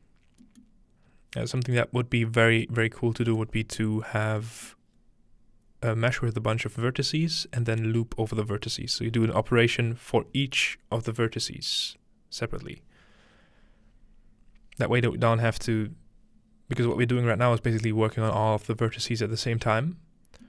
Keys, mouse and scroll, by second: 0.0 middle click, 0.6-1.6 middle drag, 1.1-3.6 scroll up 5, 1.8-2.6 middle drag, 3.4-4.4 middle drag, 4.0 scroll down 2, 4.7-9.4 middle drag, 16.9-17.2 scroll down 2, 17.2 middle click, 17.5-17.9 scroll up 3, 18.4-19.9 middle drag, 18.7-19.9 scroll up 1.